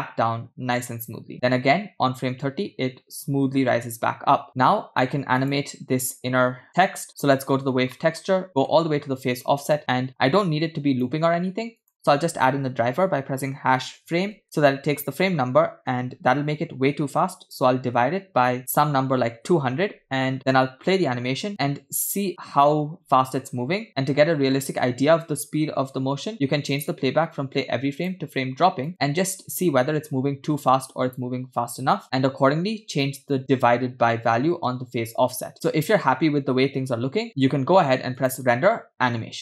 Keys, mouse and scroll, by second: 5.2 space, 5.4 click, 7.1-7.7 middle drag, 8.0 middle click, 8.7-10.3 scroll up 5, 10.6 click, 11.8-19.5 drag, 18.8 0, 20.6 space, 24.4-25.8 scroll up 3, 25.8 space, 26.7 click, 29.8 space, 36.0-37.2 scroll down 3, 37.2 scroll down 1, 37.2-38.1 scroll up 1, 37.2 space, 38.2-39.4 drag.